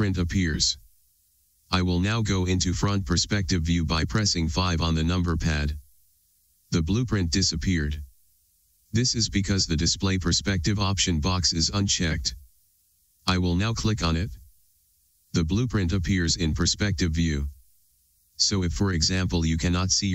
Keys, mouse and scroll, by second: 5.6 KP_5, 15.1-20.1 drag.